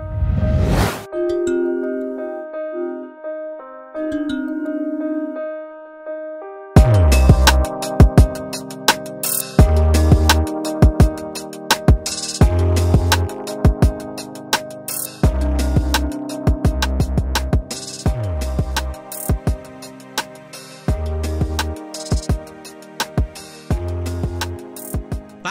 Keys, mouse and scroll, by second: 1.7 shift+click, 4.2 click, 6.3 Tab, 6.7 scroll down 1, 6.9 alt+a, 7.2 scroll down 1, 7.3 scroll up 1, 7.4-12.0 middle drag, 12.0 click, 12.3 Tab, 12.7 click, 13.3 alt+a, 13.9 click, 17.1 Tab, 17.6 alt+a, 17.8 scroll down 2, 18.0-21.0 middle drag, 21.6-22.0 scroll down 1, 22.0 shift+middle click, 22.8 scroll down 1, 23.0-25.5 middle drag.